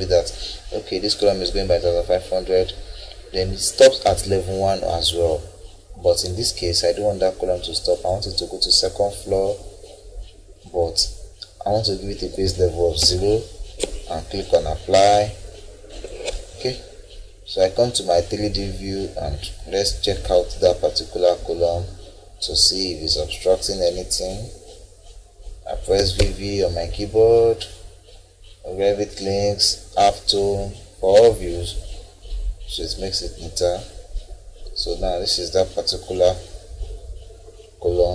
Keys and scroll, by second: 13.0 0, 26.0 v.